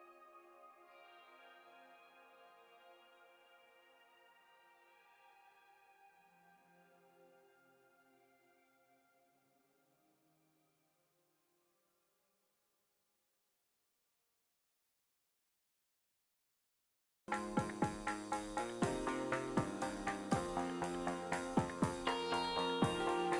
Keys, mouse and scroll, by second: 20.2-23.3 drag.